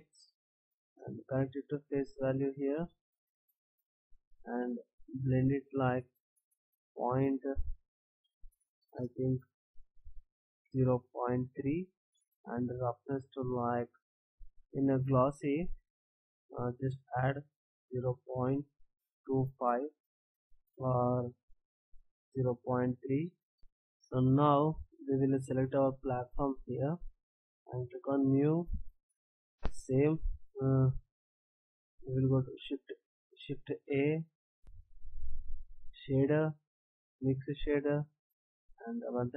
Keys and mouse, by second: 1.2-2.8 drag, 8.8-11.9 drag, 14.2 BackSpace, 21.2 click, 23.6-24.6 drag, 25.7-28.2 drag, 33.7 shift+a, 37.9-39.2 drag.